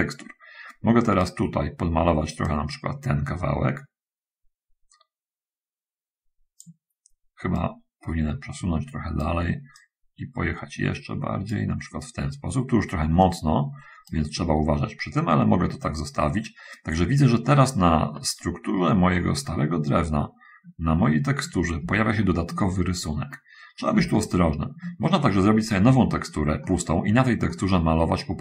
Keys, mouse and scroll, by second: 2.8-7.1 drag, 7.6-9.6 right drag, 10.1-12.0 drag, 13.6-14.6 right drag, 19.4-21.1 middle drag, 22.2 shift+middle click, 23.1-24.0 shift+scroll up 2, 24.0-25.2 shift+middle drag, 25.5-26.8 middle drag, 27.0 middle click, 27.8 middle click.